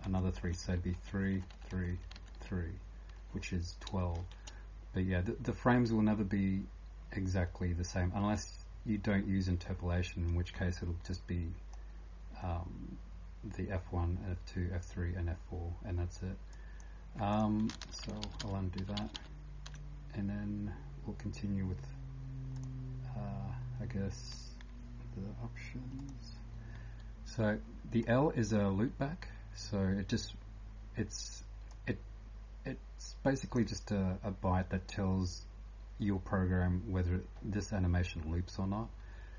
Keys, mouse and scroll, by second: 0.0-39.3 typing, 4.2 shift+Home, 17.8-19.9 ctrl+z, 23.6 scroll down 2, 26.0 click, 31.7 click.